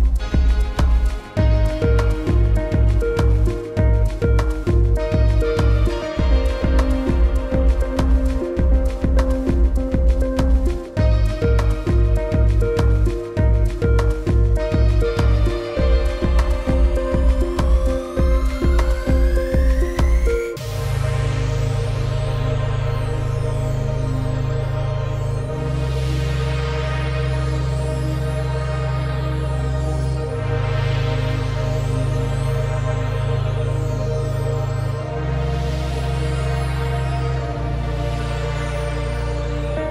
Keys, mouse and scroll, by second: 2.0 click, 3.3 click, 6.2 click, 7.5 shift+click, 8.9-9.9 alt+scroll down 4, 10.0 click, 10.5 ctrl+g, 10.8 click, 13.3 click, 15.4 alt+click, 16.8-17.7 typing, 18.0 click, 21.5 scroll down 1, 22.0 ctrl+g, 22.2 click, 22.5 space, 22.7 click, 23.6 alt+scroll up 1, 23.9 click, 24.1 space, 24.4 click, 25.6 space, 26.8 alt+scroll up 1, 26.9 space, 27.1 click, 27.4 scroll up 1, 27.5 click, 27.9 space, 29.3-29.7 alt+scroll down 2, 29.7 click, 29.9 space, 30.2 click, 31.6 alt+scroll up 2, 32.3 click, 33.9 ctrl+shift+click, 36.5 ctrl+click, 39.8 click.